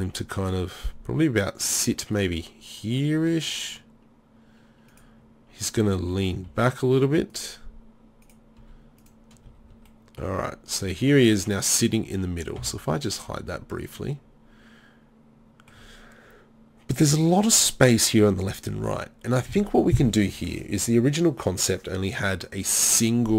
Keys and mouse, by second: 2.7 drag, 6.4 r, 8.6-10.8 typing, 9.9-10.3 drag, 11.3-12.6 right drag, 12.6 h, 13.3 z, 14.6 middle click.